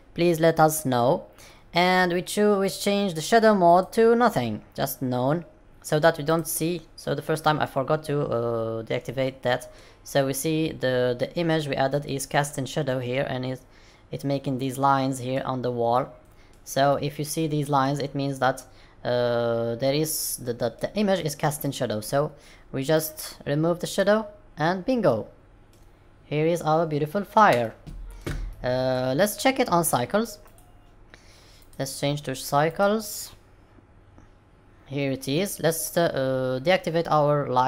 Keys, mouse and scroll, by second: 3.6 click, 6.9 middle click, 8.1-8.7 scroll up 4, 9.0 middle click, 12.0 middle click, 14.7 middle click, 15.8 middle click, 16.8 middle click, 17.9-18.8 scroll down 3, 18.8 scroll up 1, 19.8 middle click, 21.1 middle click, 22.9 click, 25.0 middle click, 25.8-26.5 scroll down 3, 26.5-27.4 scroll up 2, 28.2 shift+middle click, 28.4 middle click, 30.4 click, 31.5 click.